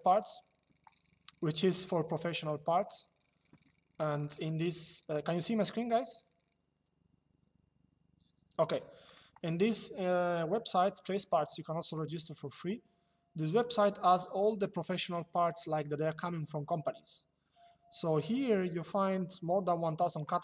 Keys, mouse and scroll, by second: 8.7 click, 13.2 click, 18.5 click.